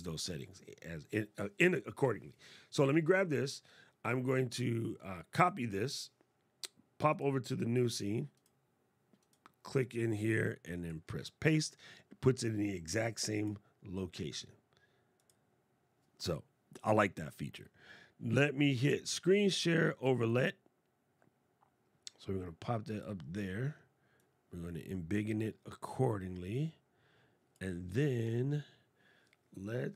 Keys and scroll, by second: 10.7 super+v.